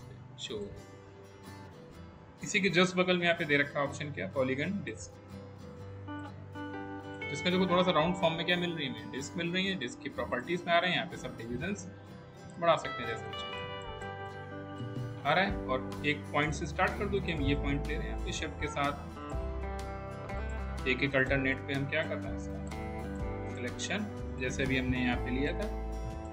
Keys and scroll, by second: 1.7 Delete.